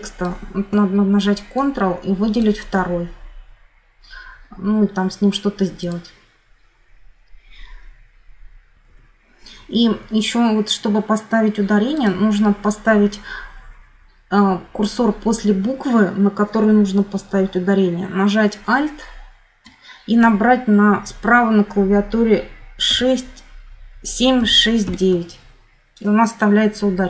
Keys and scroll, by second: 8.7 F9, 22.6 alt+7, 24.1 alt+6, 24.6 alt+9.